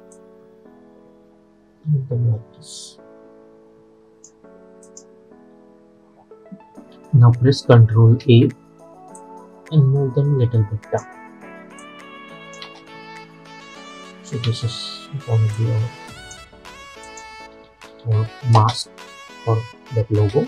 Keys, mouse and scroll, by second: 8.3 ctrl+a, 9.3-11.9 drag, 11.9 click, 12.7 space, 15.6-17.1 drag, 17.6 scroll down 1, 18.7 space.